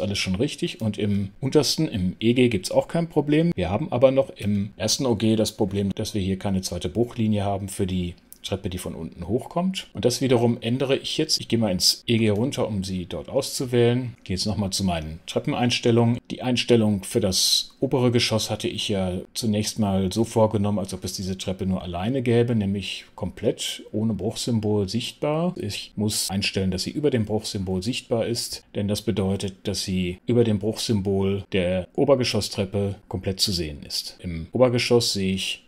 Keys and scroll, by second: 0.1 super+5, 4.2 super+6, 12.1 super+5, 14.1 super+t, 34.1 super+6.